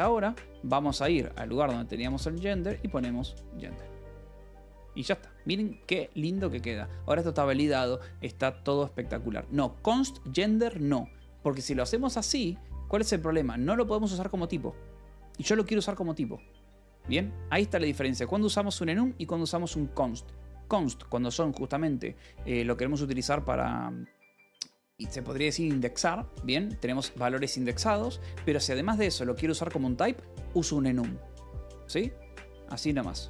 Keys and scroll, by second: 0.8-5.6 typing, 4.9 Escape, 6.5 ctrl+s, 11.5 k, 12.4 c, 12.4 Escape, 14.1 u, 18.5 ctrl+s, 22.0 ctrl+s, 27.1-29.6 typing, 27.8 Escape, 30.0 Escape, 33.1 k.